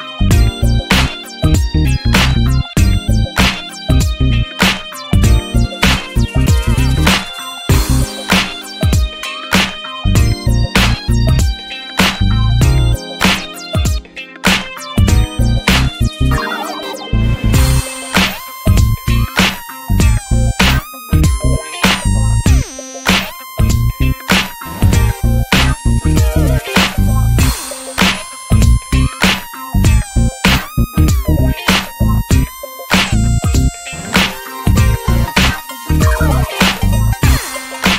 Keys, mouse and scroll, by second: 0.7 click, 1.8 click, 3.0 ctrl+z, 3.3 ctrl+z, 3.7 click, 4.1-5.5 drag, 5.9 click, 6.4-7.3 drag, 7.3 scroll down 3, 7.5 alt+z, 7.7 Tab, 7.8 click, 8.0 scroll down 2, 8.3 ctrl+s, 8.5 ctrl+s, 9.0 click, 9.2 Tab, 9.5 scroll down 1, 9.5 alt+z, 9.8-10.3 shift+middle drag, 10.6 click, 10.7 scroll down 2, 11.1 ctrl+s, 11.5 click, 11.8 click, 12.1-12.6 shift+middle drag, 12.6 ctrl+s, 12.7-13.0 scroll up 3, 13.0 shift+middle click, 13.2-13.9 scroll down 3, 13.4 ctrl+s, 14.1 click, 16.7 ctrl+s, 16.8-17.4 scroll up 4, 17.1 shift+middle click, 17.4 ctrl+s, 17.7 click, 18.1 scroll up 1, 18.3 shift+middle click, 18.6 ctrl+s, 18.8-19.6 scroll up 2, 18.9 shift+middle click, 19.9 e, 21.5 scroll down 3, 21.6 shift+middle click, 21.7-22.0 shift+scroll up 1, 22.0 e, 23.2 click, 23.5 alt+z, 23.6-24.3 scroll up 2, 23.8 shift+middle click, 24.3 ctrl+s, 24.6 click, 24.8-25.1 scroll down 2, 25.1 ctrl+s, 25.9 ctrl+s, 26.1 click, 26.5-29.5 drag, 29.8 ctrl+s, 30.1 alt+z, 30.5-31.0 scroll up 3, 30.7 shift+middle click, 31.0 ctrl+s, 31.3-31.8 shift+middle drag, 31.8 e, 33.9 scroll down 2, 34.0-34.8 shift+middle drag, 34.8 e, 36.3 click, 37.3 shift+middle click, 37.6 click.